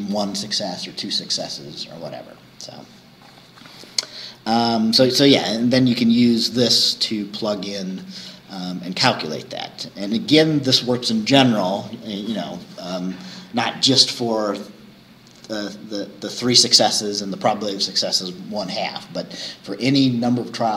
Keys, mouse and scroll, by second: 7.4 scroll down 2, 9.6-13.0 scroll down 2, 13.0-17.2 scroll down 1, 17.2-20.7 scroll down 1.